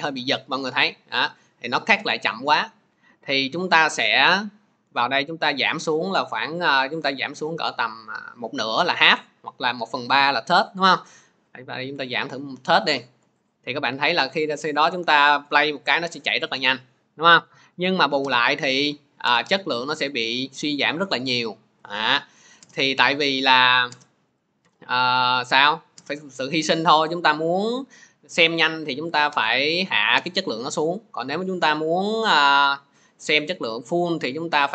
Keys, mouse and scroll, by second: 5.2 click, 11.7 click, 13.3 click, 17.8 click, 19.6 scroll, 20.8 middle click, 22.3 click, 28.9 click, 30.0 click, 33.0 click.